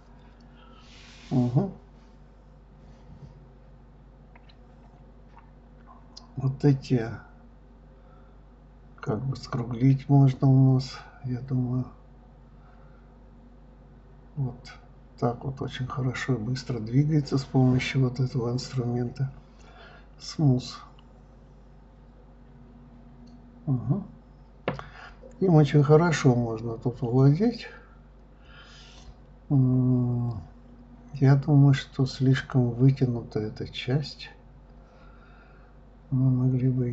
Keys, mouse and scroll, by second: 1.8 click, 2.7 click, 3.4 middle click, 4.0 click, 4.5 click, 5.0 shift+click, 5.4-6.9 middle drag, 7.1 shift+click, 7.5 shift+click, 8.0 shift+click, 8.3-9.2 middle drag, 9.2 shift+click, 9.5 shift+click, 10.0 shift+click, 10.4 shift+click, 10.8 shift+click, 11.7 click, 12.3 click, 14.9 click, 15.2-16.7 middle drag, 17.5 click, 18.0 click, 19.3 click, 19.5 middle click, 20.3 click, 20.9 shift+click, 21.4 click, 23.0 click, 23.2-24.7 middle drag, 26.9 click, 28.0 click, 28.5 click, 30.9 click, 31.6 click, 32.4 b, 35.0 click, 36.5 click.